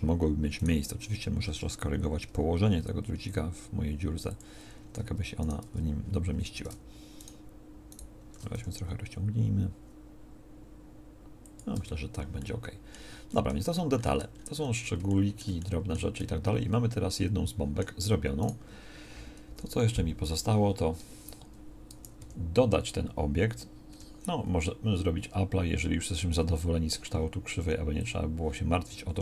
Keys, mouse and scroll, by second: 2.3 g, 5.7 Tab, 6.3 a, 8.5 s, 11.7 Tab, 19.5 KP_1, 22.2 g, 29.1 g.